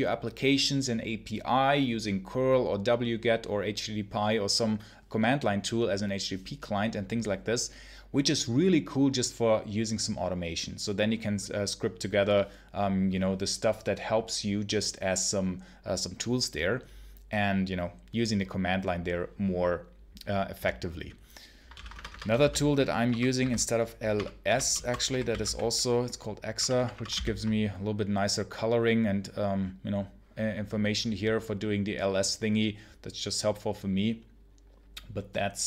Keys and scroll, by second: 21.6 ctrl+l, 21.8 Return, 22.2-26.4 typing, 26.9 ctrl+BackSpace, 27.0 ctrl+k.